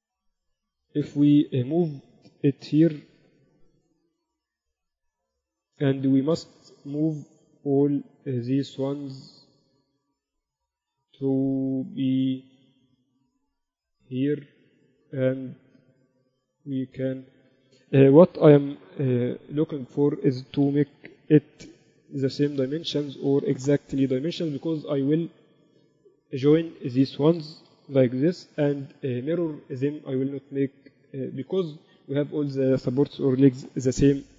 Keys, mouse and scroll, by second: 3.1 click, 4.2 z, 5.7 Tab, 6.1-7.9 right drag, 6.9-7.9 drag, 7.9 ctrl+z, 8.6 click, 8.6 right click, 8.8 right click, 9.3-11.3 drag, 9.3 right click, 12.0 KP_3, 15.4-19.0 middle drag, 16.8 click, 19.0 KP_4, 19.3 KP_8, 19.5 KP_8, 21.3-21.7 KP_4, 23.0 z, 24.3 KP_4, 24.5 KP_4, 24.7 KP_4, 26.3-28.1 right drag, 28.4 ctrl+j.